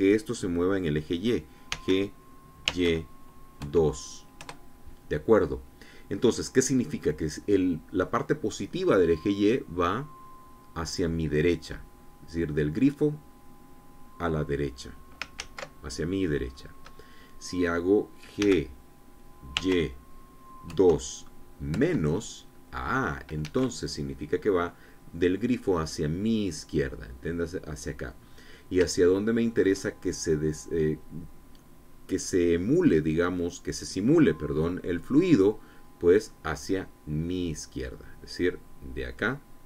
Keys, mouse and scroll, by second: 2.2 g, 3.2 y, 4.1 KP_2, 4.9 KP_Enter, 15.9 ctrl+z, 17.1-17.4 scroll up 2, 19.0 g, 20.1 y, 21.2 KP_2, 22.3 KP_Subtract, 24.0 Escape, 28.8-29.1 scroll up 2, 29.6 shift+middle click, 36.4 scroll down 2.